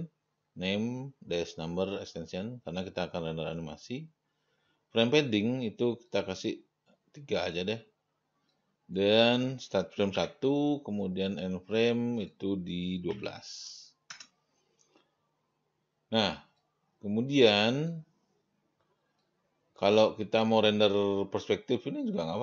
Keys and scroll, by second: 10.4 1, 13.2-14.0 typing, 14.4 Return.